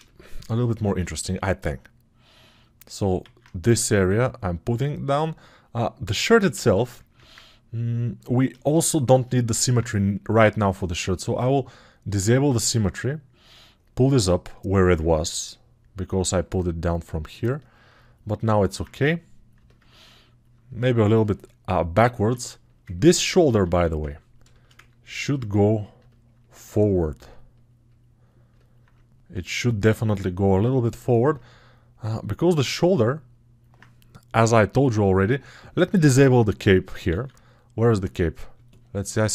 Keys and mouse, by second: 9.4 alt+q, 31.0-35.9 alt+drag, 31.0-35.9 alt+middle drag, 31.0-35.9 alt+right drag, 35.9 ctrl+space.